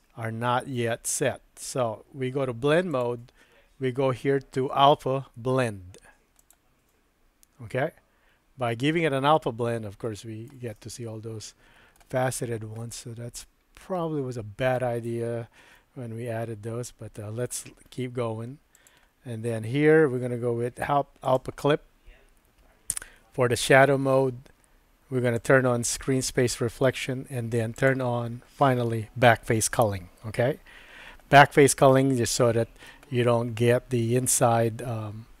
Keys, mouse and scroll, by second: 2.9-7.8 drag, 10.1 middle click, 10.8-11.9 middle drag, 12.9-15.1 middle drag, 15.8-17.5 middle drag, 18.9-21.6 drag, 25.4 click, 31.9-32.9 middle drag.